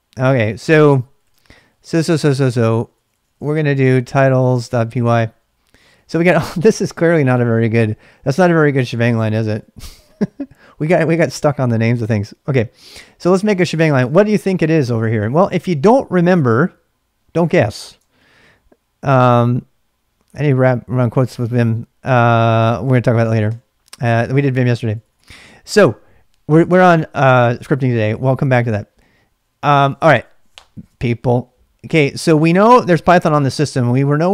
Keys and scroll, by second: 0.2 ctrl+a, 0.3-10.7 typing, 12.1-14.3 typing, 18.1 ctrl+a, 23.5-25.0 typing, 33.5-34.3 typing.